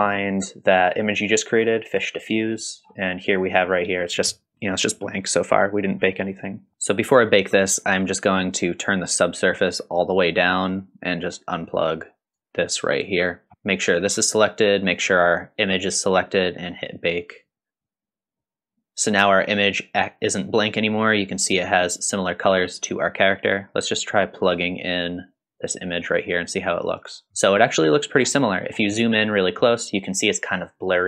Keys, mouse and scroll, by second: 2.6-4.3 scroll up 3, 6.0 click, 9.7-10.4 drag, 11.6-12.4 drag, 13.8 click, 14.8 click, 17.2 click, 24.5-26.2 drag, 27.8-28.2 middle drag, 28.5 scroll up 3, 29.1-29.6 shift+middle drag.